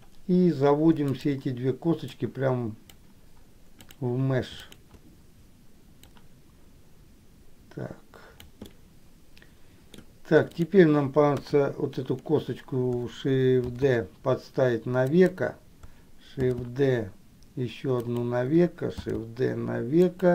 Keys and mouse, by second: 1.3 shift+click, 2.3-3.3 drag, 4.8 shift+click, 6.4-8.8 drag, 8.9-10.1 middle drag, 10.7 click, 11.6 KP_1, 14.0 shift+d, 16.8 shift+d, 19.3 shift+d.